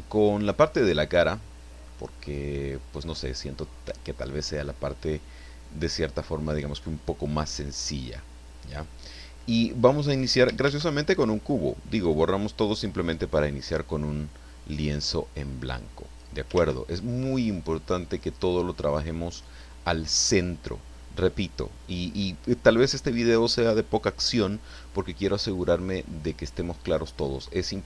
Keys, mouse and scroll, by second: 0.7-2.0 middle drag, 2.1-2.6 scroll up 1, 2.9 scroll down 1, 10.6 shift+a, 11.9 click, 13.9-16.4 drag, 16.5 ctrl+z, 17.9-19.6 middle drag, 20.0-20.6 scroll up 1, 20.8 scroll down 1.